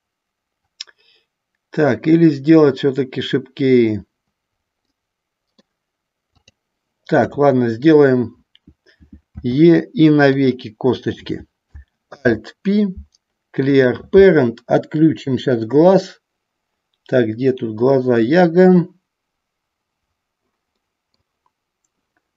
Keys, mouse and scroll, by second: 5.0 middle click, 6.6 click, 7.5 KP_3, 9.6 e, 10.6 click, 12.2 alt+p, 21.0 middle click.